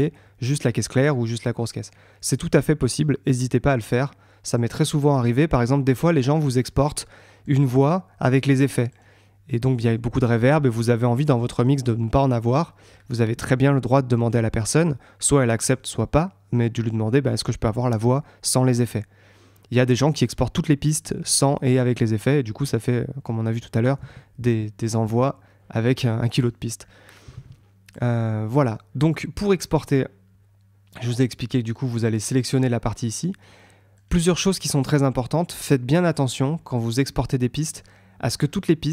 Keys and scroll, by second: 22.9 super+Tab, 26.2 super+Tab.